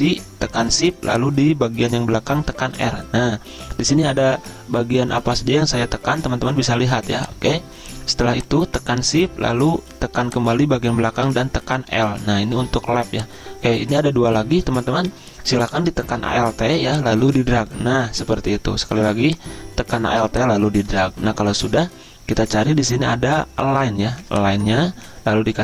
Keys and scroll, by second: 2.7 r, 11.9 l.